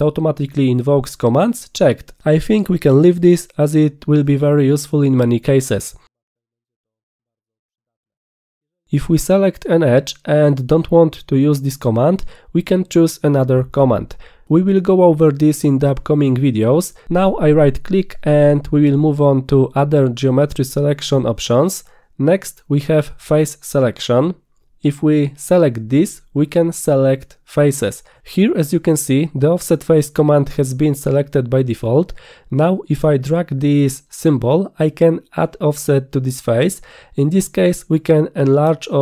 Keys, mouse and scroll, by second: 8.0 click, 10.0 click, 17.5 right click, 18.5 click, 25.1 click, 27.3 click, 28.1 click, 28.7 click, 33.7-35.5 drag.